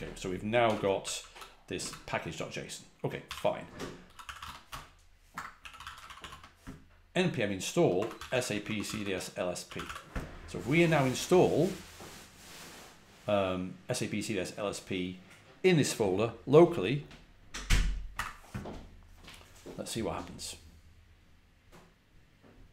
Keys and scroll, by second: 0.4-1.7 typing, 2.9-6.6 typing, 7.6-10.3 typing, 18.0 typing.